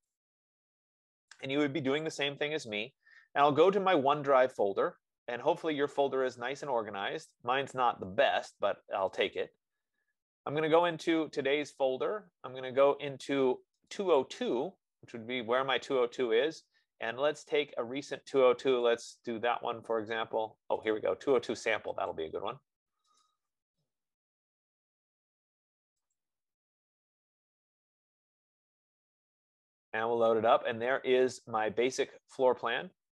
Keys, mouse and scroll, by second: 4.4 click, 9.4 click, 9.8 click, 10.7-11.5 typing, 11.2 click, 11.6 click, 14.2 right click, 14.6 right click, 19.2 right click, 21.1 click, 30.2-32.2 drag.